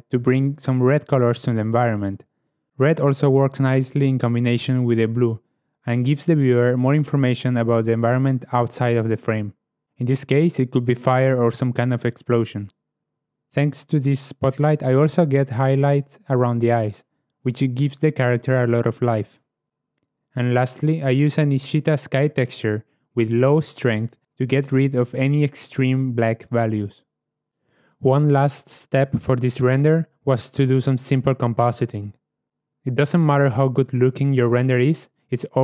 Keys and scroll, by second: 23.0 ., 23.5 1, 24.1 Return, 28.1 0, 28.3 Return, 30.4 0, 30.6 ., 30.7 Return, 30.7 1.